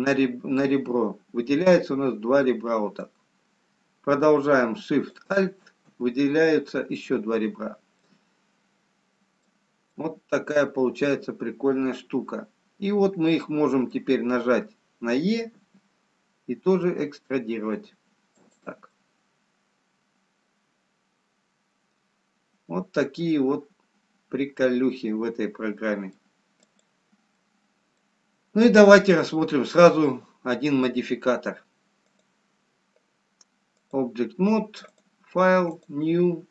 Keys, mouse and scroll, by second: 5.4 alt+shift+click, 6.5-6.9 scroll down 2, 8.3 middle click, 10.8 middle click, 16.5 e, 19.5 middle click, 28.3 click, 28.3 middle click, 32.6 click, 34.9 click.